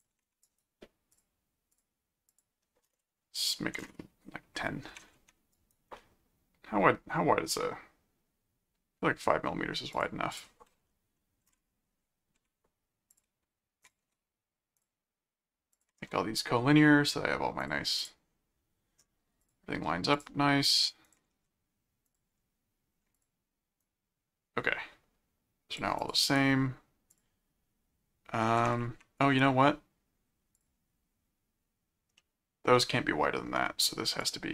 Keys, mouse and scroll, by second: 0.4 right click, 1.1 click, 1.9 click, 5.5 right click, 9.9 click, 11.9-12.3 scroll up 2, 13.1 ctrl+click, 13.8 ctrl+alt+click, 14.0 ctrl+alt+q, 14.7 ctrl+click, 15.7 ctrl+click, 17.6 click, 19.4 click, 20.1 ctrl+click, 21.0 ctrl+alt+click, 21.3 ctrl+alt+q, 22.1 ctrl+click, 23.1 ctrl+click, 23.8-25.7 drag, 26.0 click, 26.2 right click, 27.1 click, 29.2 right click, 30.5 click, 32.2 middle click, 34.2 click.